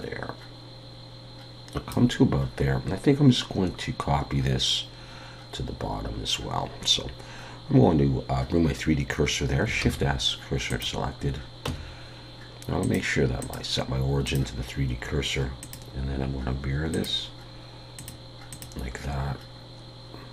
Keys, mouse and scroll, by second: 9.8 shift+s, 11.7 Tab, 12.8 click.